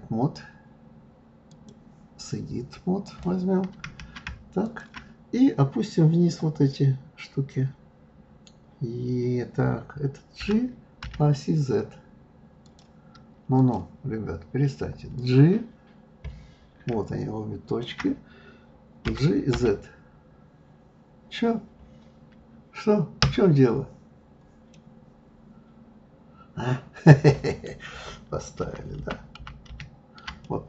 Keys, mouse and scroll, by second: 3.0 click, 4.6 shift+click, 10.4 g, 13.6 click, 15.1 click, 17.6 shift+click, 19.0 g, 23.2 \, 24.7-27.7 middle drag, 28.6 ctrl+z, 29.0 ctrl+z, 30.4-30.6 middle drag.